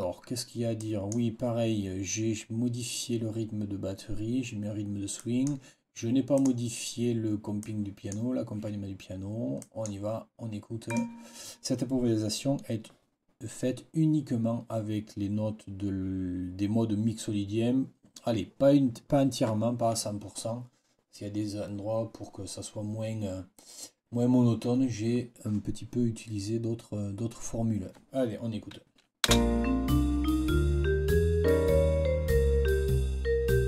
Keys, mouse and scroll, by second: 0.7 click, 5.1 click, 6.2 click, 7.5 click, 7.8-8.2 scroll up 1, 9.5-9.9 scroll up 1, 10.8 scroll up 1, 29.2 space.